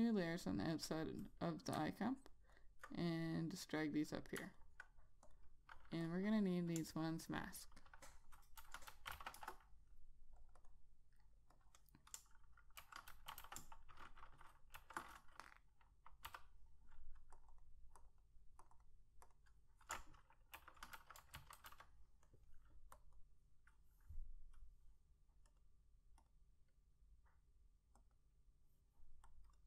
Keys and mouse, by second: 2.4 alt+click, 4.9 alt+click, 6.6 double click, 8.7-10.0 typing, 10.8 click, 11.0 double click, 11.9 click, 12.5 click, 12.9-15.1 typing, 16.6 l, 17.8 click, 17.9 double click, 18.4 click, 18.5 double click, 19.0 click, 19.1 double click, 19.6 click, 20.3 click, 20.7-22.6 typing, 23.4 click.